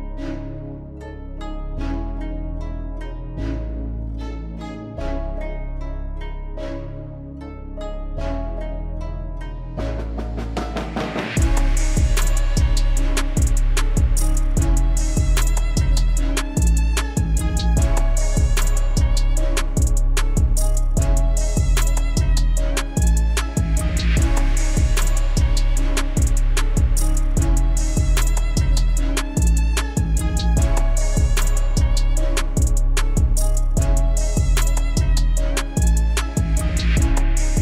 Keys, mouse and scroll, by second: 0.7 KP_1, 1.3 scroll down 1, 1.5-1.9 shift+middle drag, 1.9-2.4 scroll down 1, 2.4 click, 2.9 g, 3.8 click, 4.5 KP_1, 5.5 drag, 5.8 KP_1, 6.2 KP_Enter, 6.6 KP_3, 8.2 middle click, 8.8 KP_3, 9.6 shift+a, 11.7-12.2 middle drag, 12.2 Tab, 12.9 m, 13.9 1, 14.3 KP_1, 15.1 g, 15.8 click, 16.4 e, 18.0 e, 19.4 a, 19.9 g, 22.7 click, 23.4 e, 25.9 e, 27.2 click, 28.1 ctrl+shift+b, 29.3-29.8 scroll up 2, 29.8 ctrl+z, 29.9 ctrl+z, 30.1 ctrl+z, 30.2 ctrl+z, 30.4 ctrl+z, 31.1 ctrl+z, 31.5 ctrl+z, 31.8 ctrl+z, 32.2 scroll down 2, 32.4 click, 32.9 g, 34.1 click, 35.4 x, 36.0 middle click, 36.9 a, 37.3 a.